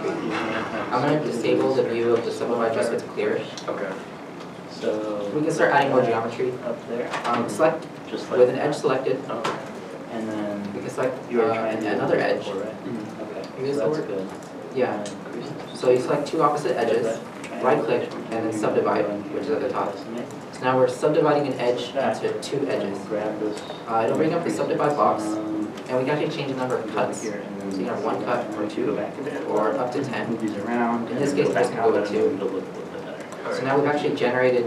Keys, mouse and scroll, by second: 0.1 middle click, 0.1 shift+middle click, 1.5 scroll up 1, 3.3 middle click, 3.7 3, 4.3 middle click, 5.0 middle click, 10.5 middle click, 12.3 shift+click, 13.1 right click, 14.8 ctrl+z, 15.1-15.5 scroll up 1, 17.1 middle click, 17.7 right click, 31.9 2, 32.1 Return, 33.2 middle click, 33.6 1.